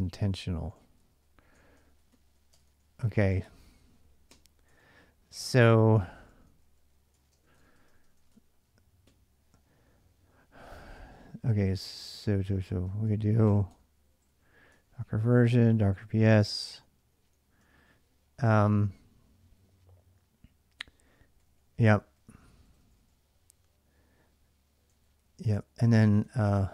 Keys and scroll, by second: 0.0-8.9 typing, 5.5 ctrl+[, 5.6 ctrl+j, 10.5-18.8 typing, 13.5 Return, 16.2 ctrl+[, 16.3 ctrl+j, 20.3-23.4 typing, 24.6-26.6 typing, 26.5 ctrl+[, 26.6 ctrl+j.